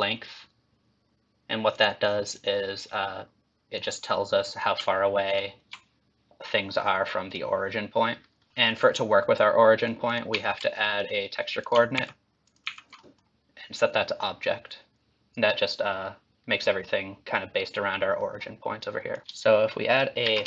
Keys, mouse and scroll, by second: 0.0 click, 2.3 click, 3.7 click, 5.3 ctrl+shift+click, 7.3 click, 8.5 middle click, 10.1 ctrl+click, 10.4 ctrl+t, 10.7 middle click, 11.6 click, 12.0 ctrl+x, 12.4 ctrl+click, 12.6 ctrl+x, 13.0 middle click, 14.0 click, 18.2 middle click, 19.1 click, 19.2 ctrl+x, 19.2 click, 20.2 shift+a.